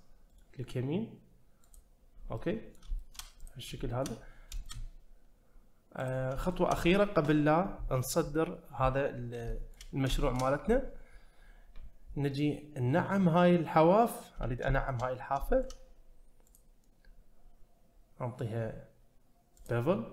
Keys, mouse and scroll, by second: 0.3-2.4 right drag, 2.4 middle click, 3.0 shift+middle click, 3.4 click, 3.8 shift+middle drag, 4.2 scroll up 1, 4.6 shift+middle drag, 6.0 click, 6.5 shift+middle click, 9.5 shift+middle click, 10.1 shift+middle click, 12.4-14.1 scroll up 1, 14.1-14.6 scroll up 1, 14.8 shift+middle click, 15.1 scroll up 1, 15.4 shift+middle click, 16.6-19.7 drag.